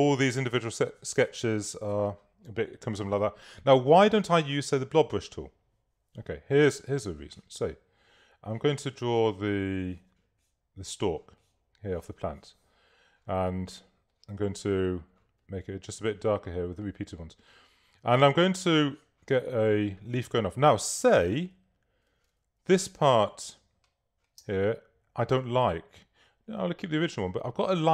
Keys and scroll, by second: 23.5 space.